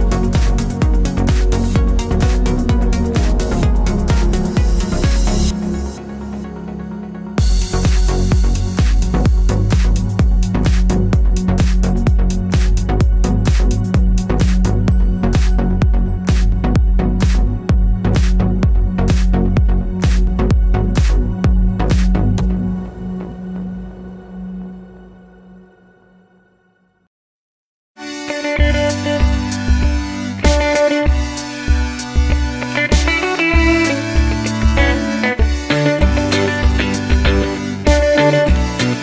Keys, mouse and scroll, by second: 0.5 z, 0.8 middle click, 1.4 Tab, 1.9 middle click, 2.5 ctrl+r, 3.7 middle click, 5.4 scroll up 2, 5.7 1, 5.9 click, 6.0 middle click, 6.7 g, 7.1 click, 7.2 middle click, 7.9 ctrl+r, 9.2-10.0 middle drag, 10.0 Tab, 10.1 click, 10.3 h, 10.4-11.4 middle drag, 10.7 scroll down 2, 11.0 Tab, 11.4 click, 11.6 Tab, 12.0 ctrl+r, 13.5 KP_7, 14.3 z, 15.8 middle click, 16.6 scroll up 1, 17.4 2, 17.5 click, 17.8 middle click, 18.0 f, 18.2 middle click, 18.5 click, 18.6 shift+click, 18.8 ctrl+z, 19.0 click, 19.2 shift+click, 19.3 f, 19.4-20.0 scroll down 2, 19.5 middle click, 20.0 click, 21.1 shift+click, 21.2 f, 21.5 click, 21.8 f, 22.3 z, 22.4-24.3 middle drag, 24.3 click, 24.4-30.3 middle drag, 24.9 1, 26.8 Tab, 28.0 KP_7, 29.1 Tab, 29.3 z, 30.0 2, 30.3 click, 31.8 x, 31.9-34.1 middle drag, 34.1 click, 34.8 z, 35.0 middle click, 35.4 x, 36.1 click, 36.7 x, 36.8 middle click, 37.7 scroll up 1, 37.8 middle click, 38.1 2, 38.2 click, 38.8 x.